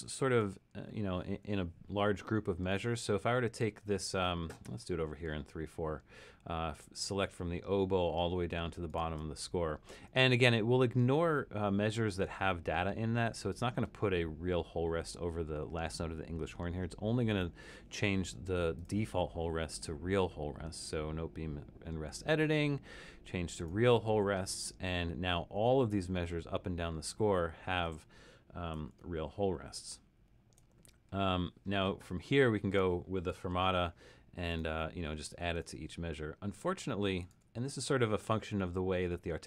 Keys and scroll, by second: 0.2 super+-, 28.9 super+=, 29.5 super+=, 30.2 super+=, 34.0-37.5 typing.